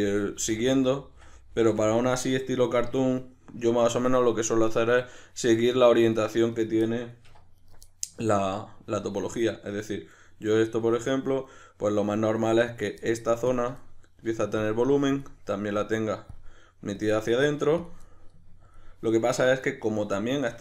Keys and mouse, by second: 3.4-6.6 middle drag, 6.6 right click, 6.8-7.6 middle drag, 7.3 1, 7.6 right click, 7.9-12.7 ctrl+middle drag, 12.7 right click, 13.0 middle click, 13.5-13.8 ctrl+drag, 13.8-14.6 middle drag, 14.6-18.0 ctrl+drag, 18.0-18.6 middle drag, 18.6-19.7 ctrl+drag, 19.7-20.6 middle drag.